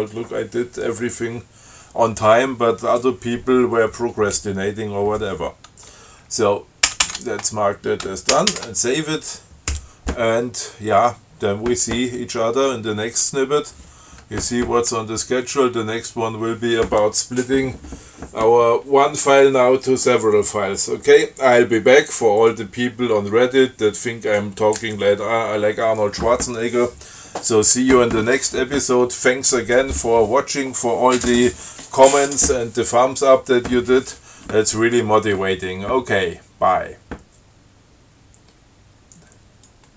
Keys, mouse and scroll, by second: 7.1 ctrl+c, 8.6 ctrl+x, 8.8 ctrl+s, 39.9 click.